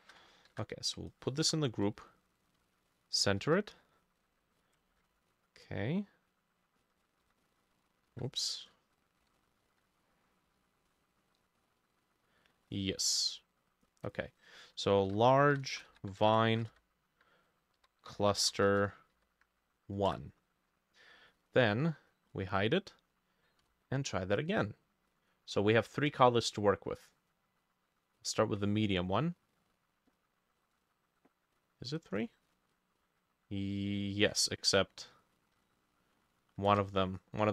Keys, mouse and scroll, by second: 0.5 ctrl+g, 1.5 t, 1.9-3.8 shift+middle drag, 4.8 ctrl+middle click, 4.9 ctrl+shift+a, 7.3 e, 8.0-13.0 ctrl+drag, 8.0 ctrl+middle click, 8.1 ctrl+z, 9.2 b, 9.7 e, 14.2-16.8 drag, 14.9-19.2 typing, 15.7 shift+middle click, 16.4 shift+middle click, 18.7 middle click, 20.1 Return, 20.1-22.1 drag, 22.6-25.7 drag, 23.7 Insert, 32.0-35.2 drag, 34.7 ctrl+middle click, 36.7 ctrl+z.